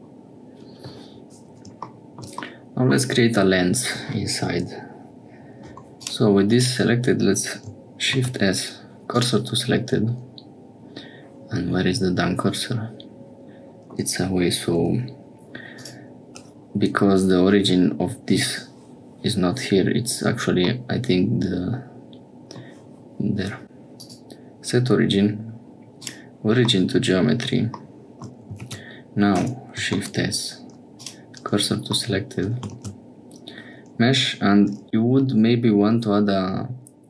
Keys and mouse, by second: 2.4 middle click, 6.0 click, 8.1 shift+s, 10.0-11.1 middle drag, 20.7-22.6 middle drag, 26.7 middle click, 28.2 middle click, 28.5 shift+a, 29.9 shift+s, 32.0 shift+middle click, 32.7 shift+a.